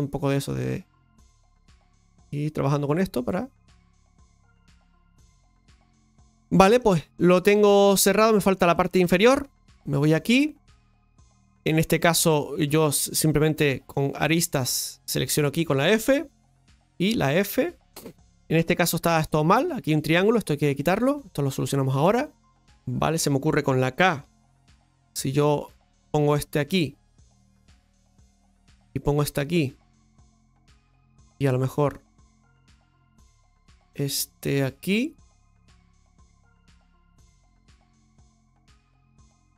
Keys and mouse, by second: 0.4 g, 0.9 right click, 1.6 g, 5.7-8.6 middle drag, 8.7-12.6 shift+middle drag, 12.6 right click, 14.2 click, 14.9 right click, 15.4 shift+right click, 16.9 right click, 17.1 f, 18.7 right click, 19.8 f, 20.9 right click, 21.1 f.